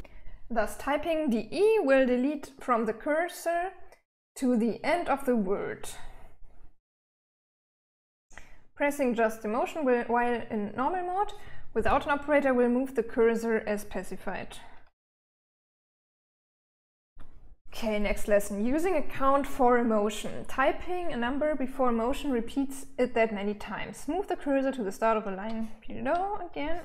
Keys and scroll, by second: 14.3-16.5 typing, 26.2-26.8 typing.